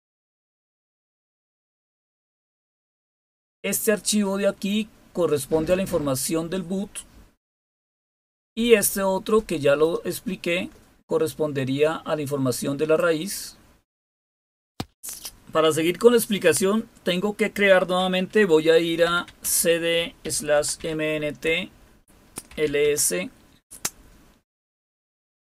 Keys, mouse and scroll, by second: 2.6-6.1 drag, 6.3 click, 9.8-13.7 drag, 14.7 Return, 18.8-23.4 typing.